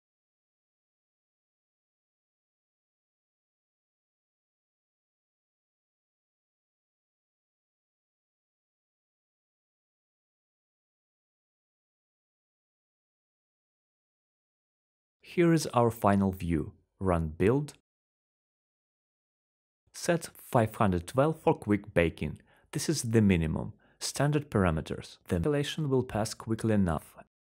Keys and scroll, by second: 9.4-13.4 typing, 15.1-16.4 typing.